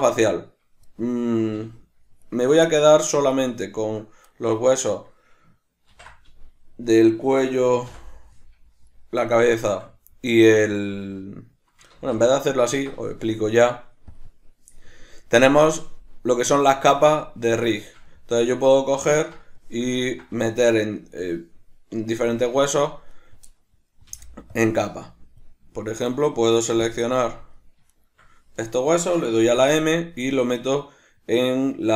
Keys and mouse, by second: 1.5 a, 2.3 right click, 2.7 middle click, 3.3 shift+right click, 3.7 shift+right click, 4.3-14.0 middle drag, 5.9 ctrl+i, 7.9 h, 12.0 ctrl+z, 14.0 click, 17.8-23.1 shift+middle drag, 23.1 right click, 23.5-27.9 middle drag, 24.1 b, 26.7 b, 27.9 shift+right click, 29.5 m.